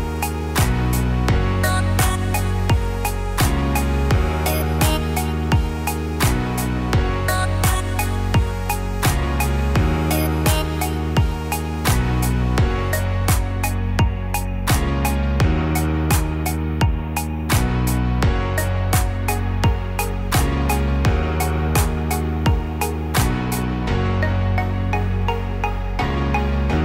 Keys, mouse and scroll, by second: 0.5 click, 0.7 click, 2.0 ctrl+b, 6.8 Tab, 7.2 click, 7.6 middle click, 8.1 scroll down 3, 8.4 middle click, 8.9 middle click, 12.0-12.5 scroll up 1, 12.5 middle click, 15.0 middle click, 15.9-16.4 scroll up 2, 16.7 scroll down 1, 16.8 scroll down 1, 18.0-19.5 scroll up 1, 19.5 scroll down 2, 20.0 middle click, 22.2 shift+a.